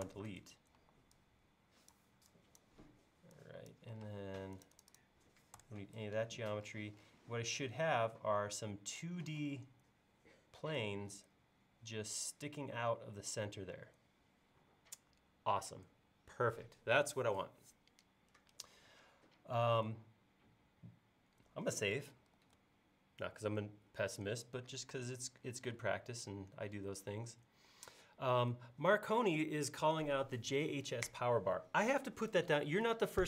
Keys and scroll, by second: 0.1 BackSpace, 0.8 e, 4.1 space, 5.6 BackSpace, 22.4 super+s.